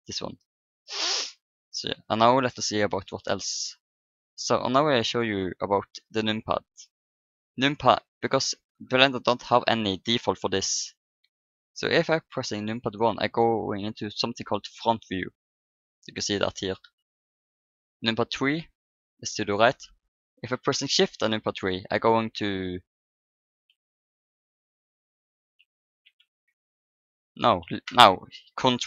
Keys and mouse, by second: 1.0-3.8 middle drag, 11.3-12.8 middle drag, 12.8 KP_1, 18.0 KP_3, 21.2 shift+KP_3, 23.9 KP_3, 25.8 shift+KP_3, 26.4 ctrl+KP_3.